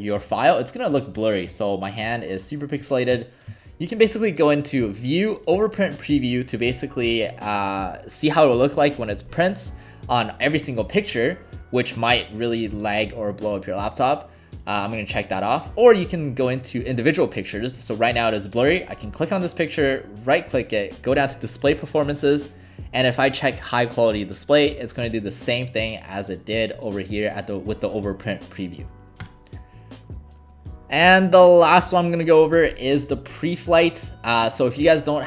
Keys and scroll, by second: 3.1 alt+space, 12.7 space.